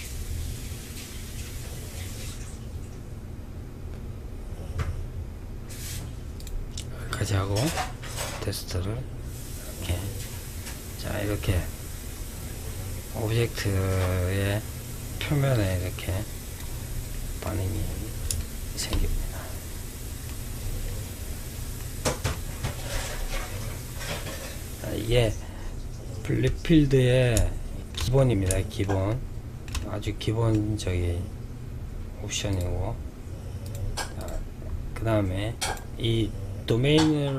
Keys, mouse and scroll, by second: 5.5 click, 6.9-9.9 drag, 16.3-16.8 middle drag, 16.8-17.5 scroll up 2, 17.5-19.7 shift+middle drag, 19.7-20.8 scroll down 5, 20.9-25.7 middle drag, 26.3-31.8 middle drag, 31.8-35.2 drag.